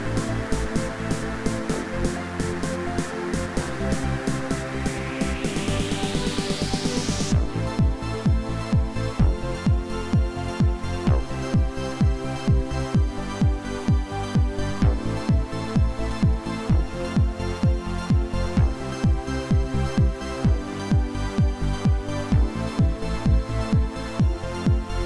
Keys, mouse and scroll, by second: 16.8 y, 17.0 scroll down 5, 17.2 shift+middle click, 17.3 y, 17.5 y, 17.7 shift+middle click, 18.1 scroll up 12, 18.3 m, 18.5-19.0 scroll down 9, 19.1 scroll up 1, 19.6 shift+click, 19.8 shift+middle click, 20.3-20.6 scroll up 5, 20.6-22.8 typing, 21.5-21.9 scroll down 12, 22.3 shift+click, 22.5 shift+middle click, 23.2 shift+middle click, 24.0 shift+click, 24.1 middle click.